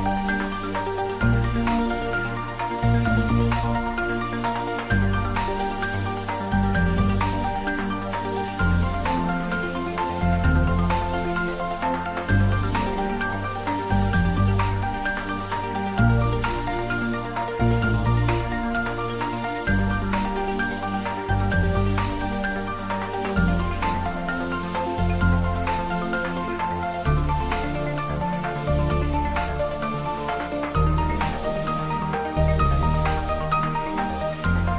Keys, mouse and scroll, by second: 1.3 s, 2.5 click, 3.0 g, 3.9 click, 5.5 g, 7.5 click, 8.8 3, 9.2 ctrl+middle click, 10.1 g, 12.2 click, 14.7 ctrl+Num_Lock, 14.7 click, 14.7 ctrl+middle click, 15.9 shift+middle click, 17.0 s, 18.3 click, 18.6 ctrl+middle click, 19.0 shift+middle click, 20.1 click, 20.6 ctrl+middle click, 21.2 s, 21.7 click, 22.0 g, 23.0 click, 23.1 s, 23.6 click, 23.7 s, 24.0 click, 25.2 g, 26.7 click, 26.9 ctrl+middle click, 27.3 shift+middle click, 27.7 ctrl+middle click, 28.3 g, 29.6 click, 29.8 ctrl+s, 30.0-32.6 ctrl+middle drag, 32.6 r, 34.0 click.